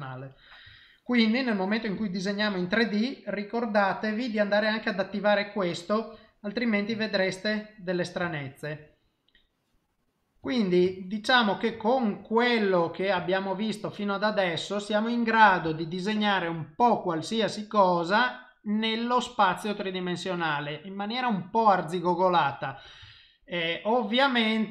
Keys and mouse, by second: 0.0 middle click, 0.8 shift+middle click, 1.2 middle click, 2.0 ctrl+middle click, 2.4 middle click, 5.4 middle click, 8.3 shift+middle click, 8.9 middle click, 10.5 ctrl+middle click, 10.8 shift+middle click, 11.3 middle click, 11.8 shift+middle click, 12.2 middle click, 13.2 shift+middle click, 13.6 middle click, 18.8 middle click, 19.6 middle click, 20.1 middle click, 23.0 shift+middle click, 23.6 middle click.